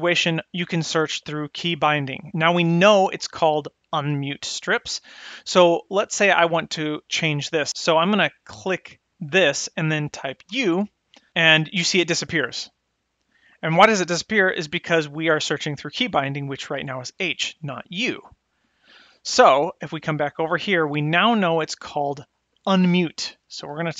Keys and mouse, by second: 9.3 click, 20.5 click, 21.3 click, 21.8-23.9 drag.